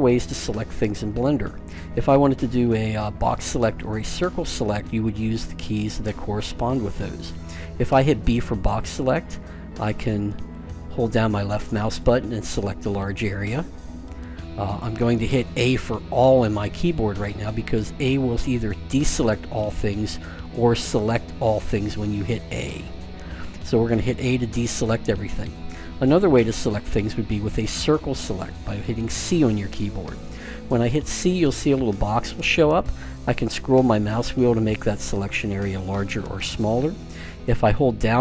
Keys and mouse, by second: 8.2 b, 17.2 a, 20.3 a, 21.4 a, 22.3 a, 22.9 a, 27.8 c.